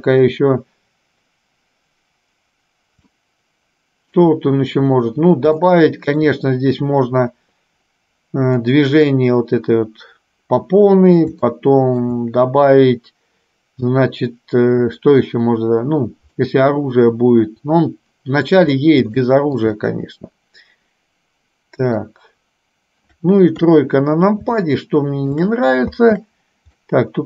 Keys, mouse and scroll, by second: 3.4-4.5 shift+middle drag, 5.7 shift+middle click, 11.6 shift+middle click, 16.6-18.7 middle drag, 19.4 shift+middle click, 20.1-22.2 middle drag, 23.7 KP_3, 24.9 shift+middle click, 26.0 space, 26.9-27.2 middle drag.